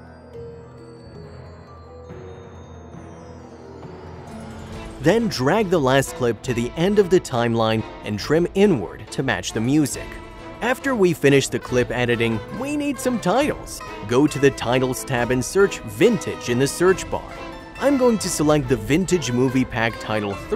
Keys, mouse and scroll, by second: 0.0 click, 0.9 click, 1.2 click, 1.3 Delete, 1.7 double click, 1.8 click, 1.9 space, 2.0 click, 2.4 i, 2.5 click, 2.6 click, 3.2 click, 3.9 click, 4.0 click, 4.2 click, 4.4 click, 4.7 ctrl+click, 6.2 click, 8.1 click, 9.6 click.